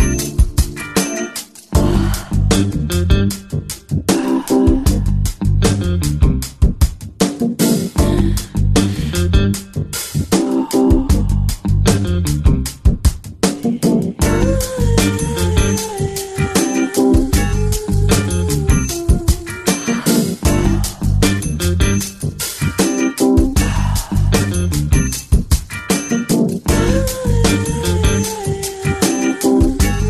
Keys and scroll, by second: 2.0 [, 2.5 [, 5.1-6.0 typing, 17.3 ], 17.8 ], 18.8 ].